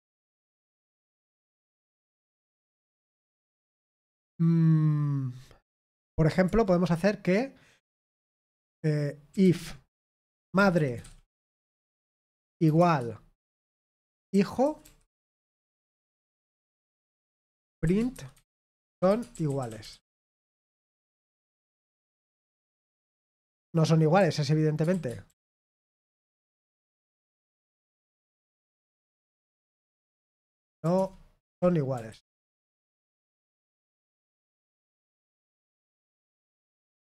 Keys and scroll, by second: 0.0-0.9 typing, 2.6 typing, 12.7 typing, 17.8-21.5 typing, 21.5 ctrl+p, 21.8 Return, 23.0 ctrl+p, 23.1 ctrl+p, 23.4 Return, 26.5-34.5 typing, 31.3 Escape, 34.6 ctrl+p, 35.3 Escape, 35.5-36.7 typing, 36.7 ctrl+p, 36.9 Return.